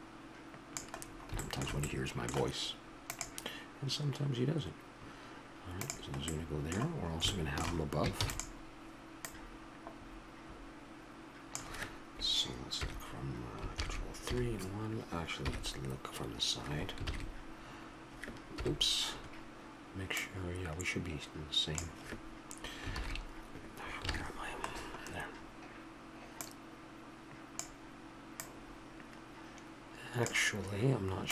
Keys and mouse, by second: 1.4-3.2 middle drag, 6.3-8.2 middle drag, 8.2 shift+d, 9.1-11.0 drag, 12.7 KP_1, 13.7 ctrl+KP_1, 14.2 KP_Decimal, 15.4 KP_3, 17.0 ctrl+KP_3, 18.5 ctrl+KP_1, 25.1-26.3 middle drag, 26.4-28.3 drag, 28.4-30.3 drag.